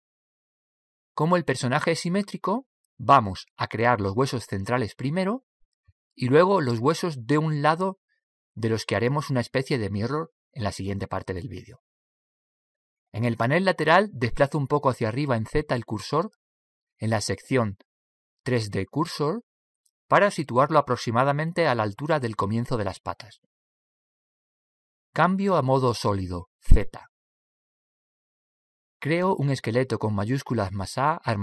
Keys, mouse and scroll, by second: 1.5 click, 15.8 click, 27.9 z.